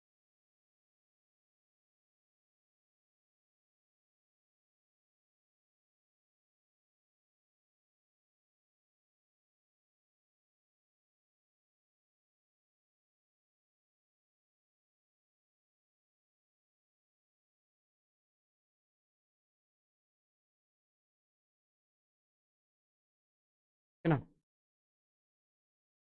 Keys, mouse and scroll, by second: 0.2 alt+middle click, 1.1-2.1 drag, 2.4 alt+middle click, 4.4 alt+middle click, 5.8 alt+middle click, 8.0 scroll down 1, 8.1 click, 9.3-10.5 drag, 10.9-12.5 drag, 12.9 alt+middle click, 14.6-16.4 drag, 16.7 alt+middle click, 18.1 click, 21.0 alt+middle click, 21.8-22.9 alt+drag.